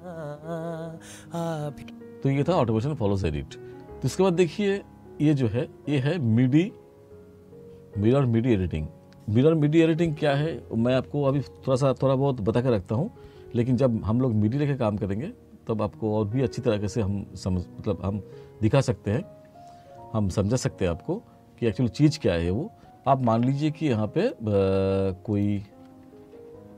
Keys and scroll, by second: 1.8 space.